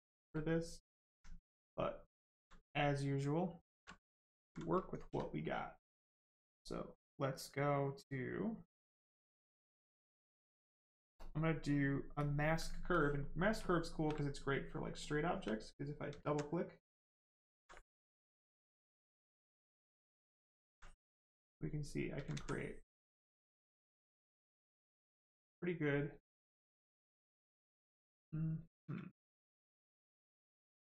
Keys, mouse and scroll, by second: 0.3 click, 0.9 alt+right click, 1.3 right click, 1.4 right click, 1.9 shift+right click, 3.9 alt+right click, 5.0 right click, 6.9 click, 12.9 ctrl+click, 14.9 click, 16.1 alt+click, 16.2 alt+click, 17.3 alt+click, 17.5 alt+click, 19.0 alt+click, 19.1 alt+click, 20.5 alt+click, 20.6 alt+click, 22.1 alt+click, 22.3 alt+click, 25.7 right click, 26.3 shift+right click, 30.2 ctrl+click.